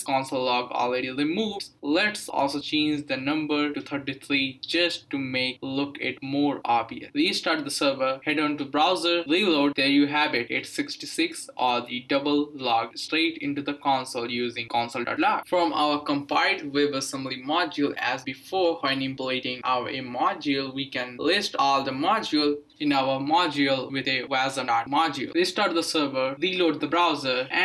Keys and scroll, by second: 1.6-2.8 typing, 7.0 ctrl+c, 7.2 Up, 7.4 Return, 9.5 Return, 14.1-24.5 typing, 22.8 Tab, 25.4 ctrl+c, 25.8 Up, 25.9 Return, 26.8 Up, 26.9 Return.